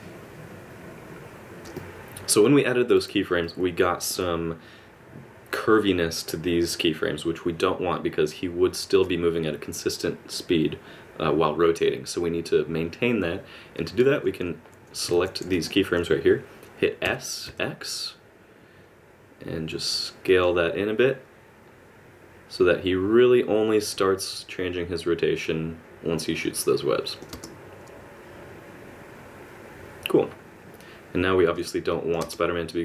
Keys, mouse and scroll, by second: 1.6 ctrl+z, 1.6 click, 1.6 space, 1.8 click, 3.4 click, 15.1 alt+a, 15.4 b, 17.0 s, 21.0 click, 27.3 space, 31.5 space, 31.9 click, 32.2 space.